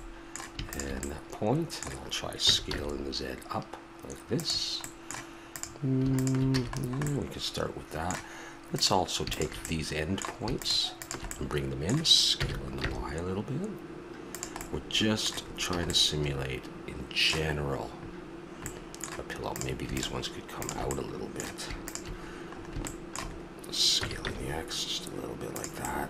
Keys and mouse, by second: 2.4 s, 6.5 a, 7.1 middle click, 9.6 middle click, 10.0-13.0 drag, 12.3 s, 14.6 click, 15.7 a, 19.5-22.3 right drag, 22.3-23.7 middle drag, 23.9 s, 25.8-26.0 drag.